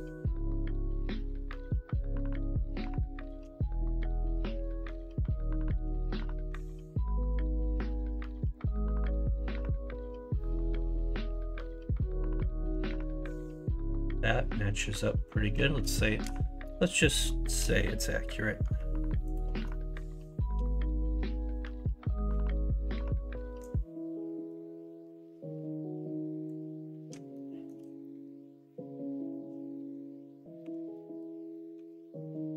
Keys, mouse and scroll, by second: 3.9 Tab, 7.2 r, 8.6 g, 12.7 Tab, 17.0 shift+middle click, 27.3 shift+middle click, 30.6 3, 31.7 x.